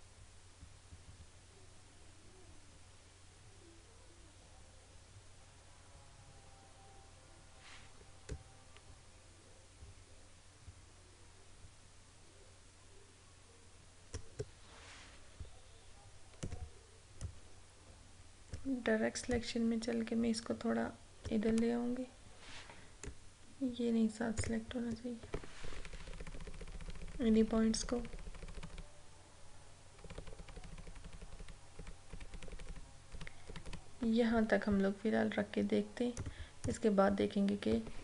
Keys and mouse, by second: 16.4-24.4 drag, 36.3 click.